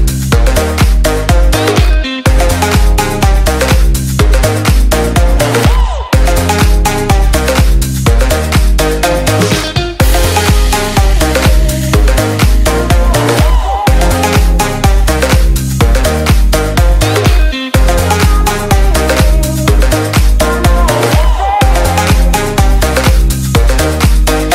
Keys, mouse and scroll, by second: 16.5 F11, 16.5 F10, 17.1 click, 17.4 F10, 17.5 right click, 18.6 click, 21.9-24.5 typing.